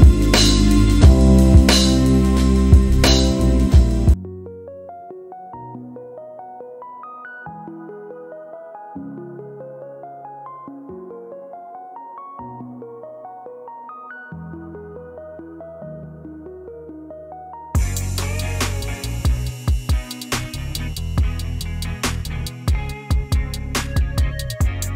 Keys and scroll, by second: 0.3 ctrl+z, 1.3 c, 3.6-4.4 typing, 4.7 Return, 8.6 e, 22.5 f.